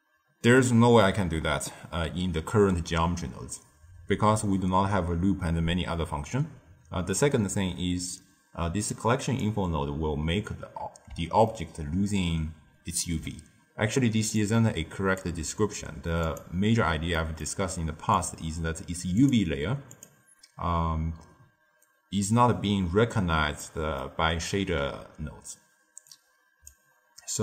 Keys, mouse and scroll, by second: 8.8 click, 11.4-14.3 ctrl+middle drag, 14.3-16.3 drag, 17.1-18.1 middle drag, 18.1 click, 19.1-22.9 drag, 23.6-26.0 middle drag, 26.0 click.